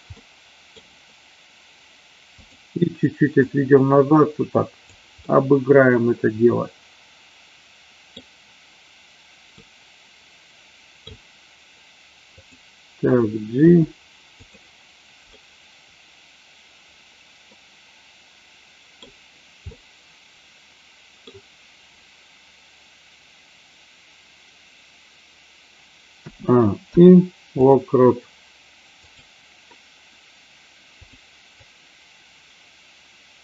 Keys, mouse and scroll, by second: 0.0-0.8 middle drag, 3.4-4.8 drag, 5.3-8.0 middle drag, 8.0 scroll down 1, 9.5 scroll up 1, 9.7-10.9 middle drag, 10.9-12.3 scroll down 1, 12.3 click, 13.6 g, 15.3 scroll up 1, 15.4-18.9 middle drag, 19.6 scroll up 1, 19.8-21.1 middle drag, 21.1 scroll down 1, 26.3 a, 26.8 i, 28.9 click, 31.1 click, 31.6-33.4 drag.